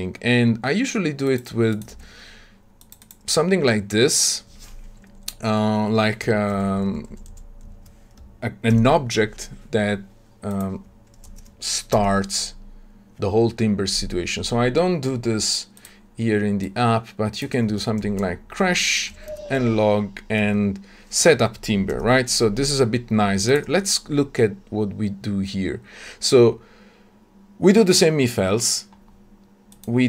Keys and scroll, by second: 1.9 shift+Escape, 6.4 ctrl+w, 7.6 ctrl+shift+w, 8.6 ctrl+/, 12.5 alt+Return, 19.2 Tab, 21.9 ctrl+alt+o, 23.4 ctrl+b.